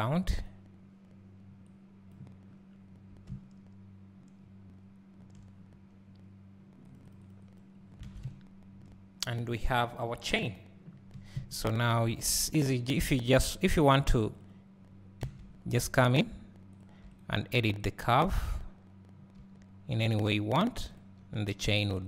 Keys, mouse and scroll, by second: 2.4-8.0 drag, 2.4 scroll down 1, 3.0 scroll up 1, 8.0 alt+a, 11.4 KP_7, 12.6 click, 13.0 Tab, 15.4 scroll up 1, 16.2 click, 19.4 g, 21.0 click, 21.6 r.